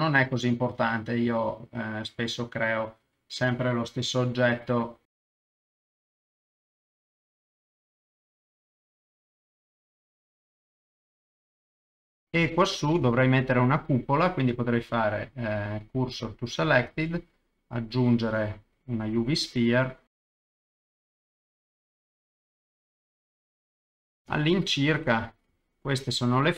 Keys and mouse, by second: 0.5 ctrl+click, 1.2 s, 3.9 click, 4.5-12.0 typing, 4.8 middle click, 5.2 middle click, 5.4 click, 5.4 middle click, 6.5 click, 6.7 click, 6.9 middle click, 7.3 middle click, 7.5 click, 7.8 click, 7.9 middle click, 8.0 click, 8.5 middle click, 8.7 ctrl+middle click, 9.3 Escape, 9.5 click, 9.6 middle click, 9.8 ctrl+middle click, 10.3 click, 10.6 click, 11.2 ctrl+click, 11.4 click, 11.6 Escape, 11.8 click, 12.1 click, 12.2 middle click, 12.6 ctrl+middle click, 13.1 shift+middle click, 13.5 middle click, 14.7 shift+s, 16.8 shift+a, 19.5 s, 20.2 click, 20.3 KP_0, 20.6 middle click, 20.7 ctrl+middle click, 20.8 shift+middle click, 20.9 right click, 21.2 right click, 21.4 middle click, 21.5 ctrl+z, 21.8 ctrl+shift+middle click, 22.4-23.8 typing, 22.7 shift+middle click, 22.9 Escape, 23.5 click, 23.6 middle click, 24.0 click, 24.1 middle click, 24.2 ctrl+middle click, 24.3 shift+middle click, 25.0 middle click, 25.7 shift+middle click.